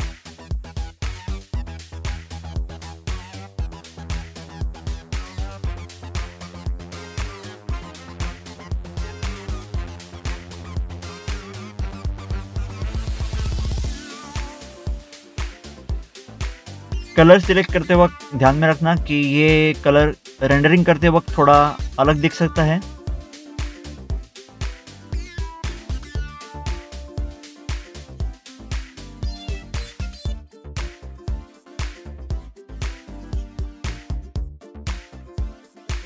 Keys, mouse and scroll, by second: 0.0 middle click, 0.1 scroll down 1, 0.3 click, 0.3 double click, 0.4 click, 0.6 double click, 0.7 click, 0.8 scroll up 1, 0.9 scroll down 1, 1.6 click, 2.0 scroll up 1, 2.0 scroll down 1, 2.4 click, 2.9 click, 3.7 click, 4.1 scroll up 1, 4.2 middle click, 4.2 middle click, 4.4 click, 4.4 scroll down 1, 4.6 double click, 4.8 click, 5.0-5.5 scroll up 2, 5.4 double click, 5.9 scroll down 1, 6.1 click, 6.1 scroll up 1, 6.3 middle click, 6.4 middle click, 6.4 scroll down 1, 6.7 click, 6.7 double click, 7.5 scroll up 1, 8.2 middle click, 8.6 middle click, 9.1 scroll down 1, 10.9 scroll down 1, 11.0 click, 13.8 double click, 13.9 click, 14.0 double click, 14.1 click, 14.1 scroll down 1, 14.2 click, 14.8 scroll down 1, 15.0 scroll up 1, 15.8 scroll up 1, 16.1 click, 16.1 scroll down 1, 16.2 double click, 16.5 middle click, 16.6 middle click, 16.7 scroll down 1, 16.8 click, 16.9 double click, 16.9 click, 17.1 scroll up 1, 17.3 scroll down 1, 17.3 scroll up 2, 17.5 middle click, 17.7 click, 17.7 scroll down 1, 17.9 scroll up 1, 18.0 scroll down 1, 18.2 click, 18.2 scroll up 1, 18.4 middle click, 18.4 middle click, 18.5 click, 19.0 middle click, 20.2 middle click, 20.3 scroll down 1, 24.6 double click, 24.7 click, 25.5 scroll up 1, 25.6 scroll down 1, 25.8 click, 26.4 scroll up 1, 26.6 scroll down 1, 26.8 scroll up 1, 26.9 scroll down 1, 27.4 scroll up 1, 27.5 scroll down 1, 27.7 click, 28.2 scroll up 1, 29.3 scroll up 1, 29.4 scroll down 1, 29.5 click, 30.1 scroll up 1, 30.2 middle click, 30.4 scroll down 1, 30.7 click, 31.5 scroll up 1, 31.6 scroll down 1, 31.9 click, 31.9 double click, 32.1 click, 32.2 scroll up 1, 32.9 middle click, 33.9 middle click, 34.3 scroll down 1, 34.7 middle click, 35.0 middle click, 35.1 scroll up 1, 35.5 scroll down 1.